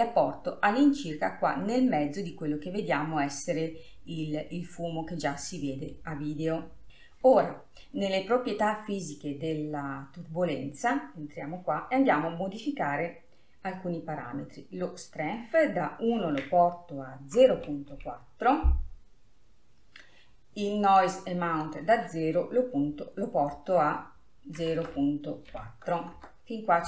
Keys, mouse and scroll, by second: 4.3-6.9 middle drag, 15.5-18.6 drag, 21.8-24.9 drag.